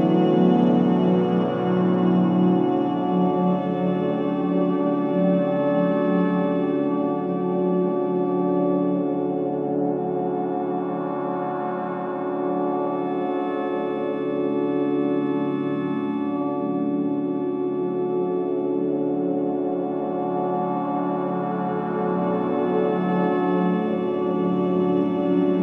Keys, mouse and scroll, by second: 0.6 alt+right click, 0.8 alt+middle click, 1.4 click, 2.0 alt+right click, 2.4 click, 2.7 alt+click, 3.1 alt+right click, 4.9 ctrl+s, 5.6 alt+click, 5.9 alt+right click, 6.3 alt+click, 6.6 click, 7.0 alt+click, 7.3 alt+right click, 7.7 alt+middle click, 8.2 alt+right click, 11.0 alt+right click, 11.5 alt+middle click, 12.1 click, 14.0 click, 14.9 ctrl+a, 16.4 right click, 17.8-22.6 drag, 22.6-25.6 drag.